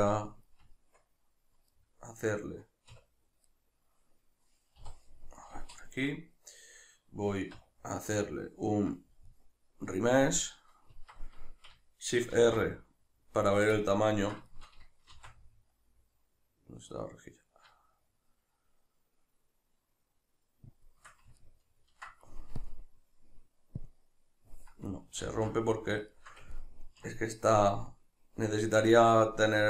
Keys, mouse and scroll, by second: 0.7 Tab, 1.7 middle click, 2.9 \, 3.5 middle click, 4.8 KP_Divide, 5.4 middle click, 6.1-10.3 middle drag, 7.5 q, 10.3-13.6 drag, 11.1 Escape, 12.3 shift+r, 13.6 right click, 13.8-22.6 ctrl+middle drag, 15.1 shift+r, 22.6-25.7 drag, 25.2 ctrl+z, 25.7-29.6 middle drag.